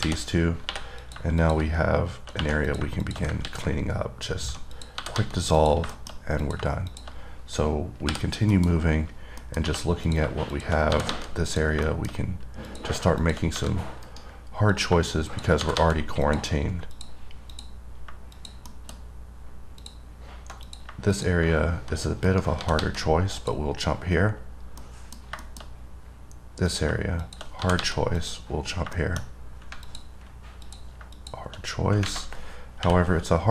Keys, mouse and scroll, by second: 1.3 click, 1.7 click, 2.9 click, 3.3 click, 5.0 click, 5.8 click, 6.2 middle click, 6.7 click, 7.1 click, 9.1-9.7 scroll down 4, 9.7 middle click, 10.3 click, 10.8 click, 11.7 click, 12.1 middle click, 12.9 click, 13.5 click, 14.3 right click, 15.0 click, 15.5 click, 16.5 click, 17.2 click, 17.8 click, 18.6 click, 18.9 middle click, 20.0 click, 20.9 click, 21.4 click, 22.5 right click, 23.6 click, 24.0-24.3 scroll down 3, 24.3 scroll up 2, 25.1 middle click, 25.5 scroll down 1, 25.7 middle click, 26.3-26.9 scroll up 1, 26.9 click, 27.5 click, 28.4 click, 29.3 middle click, 29.5 scroll down 1, 30.1 click, 30.9 click, 31.4 click, 32.2 scroll down 2.